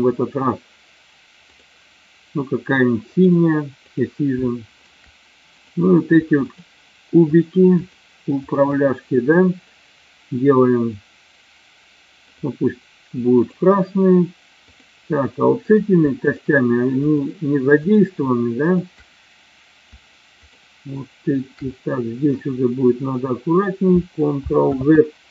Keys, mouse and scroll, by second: 1.5-3.4 drag, 3.9 click, 4.5 shift+middle click, 5.7 click, 7.9 shift+click, 8.7 shift+click, 12.3 click, 13.4 click, 14.7 click, 15.3 middle click, 16.3 shift+click, 17.2 shift+click, 21.8-22.4 middle drag, 24.9 ctrl+z.